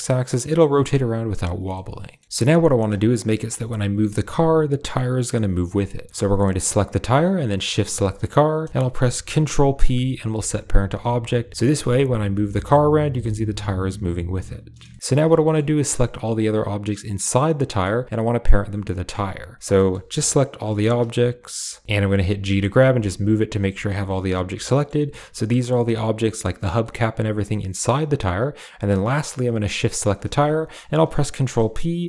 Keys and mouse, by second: 1.6-2.0 middle drag, 2.5 click, 3.1 g, 6.5 click, 7.5 shift+click, 9.6 ctrl+p, 12.0 g, 13.0 r, 14.7 shift+middle drag, 15.3 shift+middle click, 17.5 middle click, 19.3 click, 19.6 middle click, 20.3 shift+click, 20.5 g, 21.3 shift+click, 21.9 g, 22.1 g, 24.6 click, 24.9 g, 26.6 click, 29.7 shift+click, 31.8 ctrl+p.